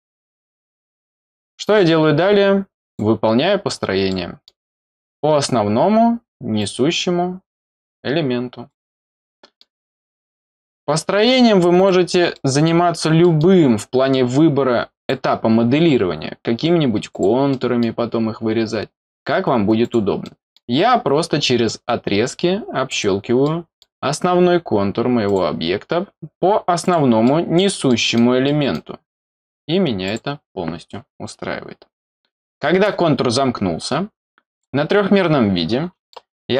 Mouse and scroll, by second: 1.1-1.5 scroll up 2, 2.8 click, 3.7 scroll down 1, 4.1 middle click, 4.8 scroll up 1, 6.6 click, 8.7 click, 9.3 middle click, 9.6-11.7 scroll up 1, 11.7 scroll up 1, 11.7 click, 12.3 middle click, 12.8 middle click, 13.2 middle click, 13.7 scroll down 1, 15.0 click, 17.1 click, 17.5 middle click, 19.8 click, 20.2 middle click, 22.9 click, 23.4 middle click, 25.2 click, 26.8 click, 27.2 middle click, 27.9 middle click, 28.4 middle click, 30.0 click, 34.5 click, 36.1 middle click.